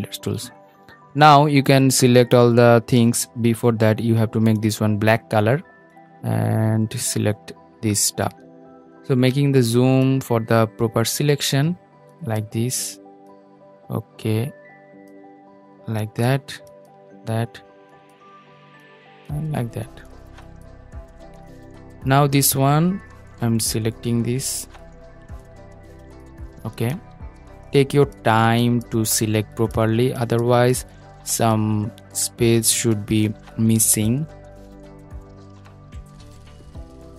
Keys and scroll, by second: 35.4 super+z.